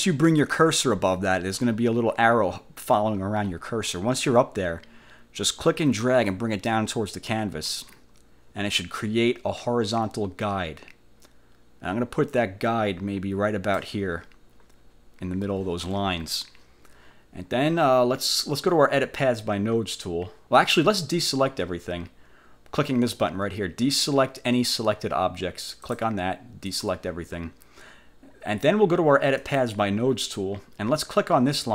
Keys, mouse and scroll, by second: 6.4-14.1 drag, 25.8 click, 26.8 click, 29.5 click.